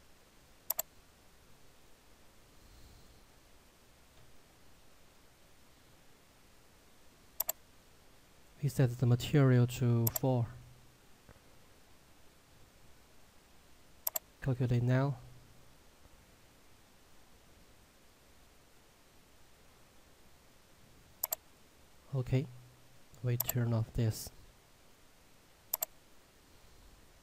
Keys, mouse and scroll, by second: 1.1 click, 5.0-7.4 scroll down 1, 7.4 click, 9.3 4, 10.2 click, 14.2 click, 21.2 click.